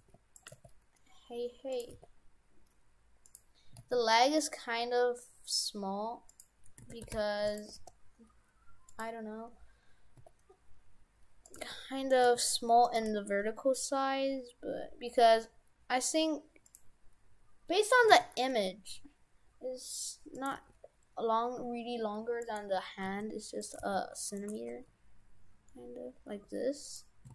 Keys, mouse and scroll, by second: 0.0 g, 0.5 g, 2.1 g, 3.8 s, 6.9 shift+f, 7.8 g, 10.2 s, 11.5 s, 11.6 g, 12.2 g, 13.1 g, 18.1 s, 20.4 s, 20.6 g, 23.0 g, 23.8 g, 24.5 g.